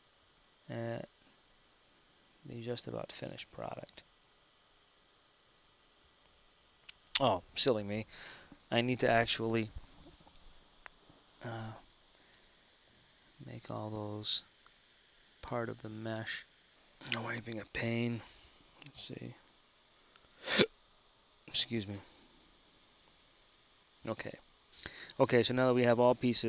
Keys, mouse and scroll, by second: 15.7 right click, 17.1 b, 19.0 z, 25.3 KP_1.